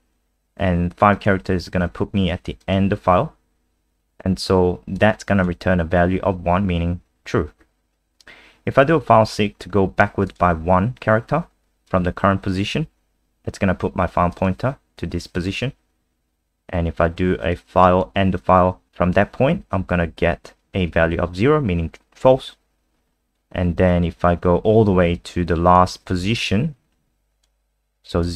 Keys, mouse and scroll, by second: 2.6 click, 7.3-8.8 scroll down 1, 8.8 click, 22.6-25.1 scroll down 1, 25.1 click.